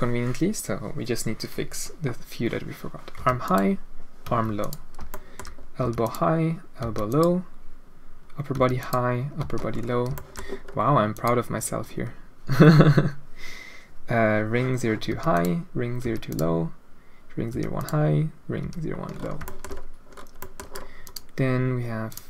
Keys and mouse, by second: 3.1 h, 3.4 middle click, 4.2 h, 4.6 click, 5.1-5.5 middle drag, 5.8 h, 6.0 click, 6.8 h, 7.0 click, 8.5 h, 8.8 click, 9.4 h, 9.7 middle drag, 10.2 shift+middle click, 10.5 middle click, 11.1 click, 15.0 h, 15.3 click, 16.0 h, 16.2 click, 17.5 h, 17.7 click, 18.6 h, 19.5 shift+middle click, 21.0 click, 22.0 click.